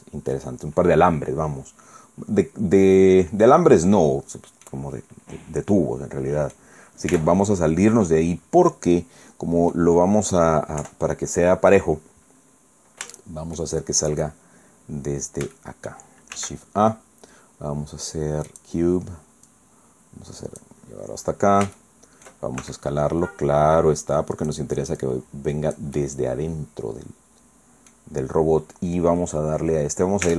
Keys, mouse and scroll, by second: 1.3-1.8 scroll down 1, 1.8-2.4 scroll up 2, 2.5 scroll down 2, 3.1 scroll down 2, 3.4 click, 3.8 scroll down 2, 4.9-5.2 scroll up 2, 5.7-6.8 drag, 7.1 Tab, 8.0-8.4 scroll down 2, 8.7-9.9 middle drag, 10.8 KP_1, 12.4-12.8 scroll down 2, 13.2 shift+middle click, 14.4-15.4 shift+scroll down 5, 15.6 shift+click, 16.4 shift+a, 18.5 click, 19.5-20.8 drag, 20.9-21.3 scroll up 2, 21.8 shift+middle click, 22.6 shift+s, 24.4 click, 25.0-28.1 drag, 30.2 Tab.